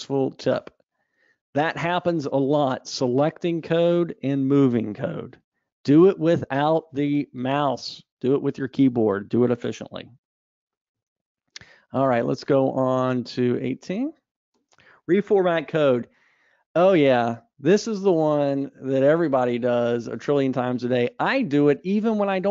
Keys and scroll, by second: 12.5 super+Up.